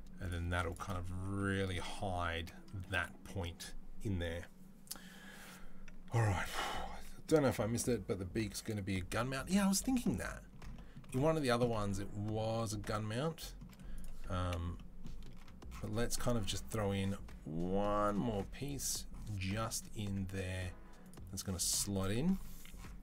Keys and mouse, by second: 0.3 z, 1.3-3.3 middle drag, 6.5 ctrl+s, 9.3-11.2 middle drag, 11.2 click, 11.3-13.8 middle drag, 13.8 click, 13.9-20.8 middle drag, 14.3 Delete, 20.8 click, 21.0-23.0 middle drag.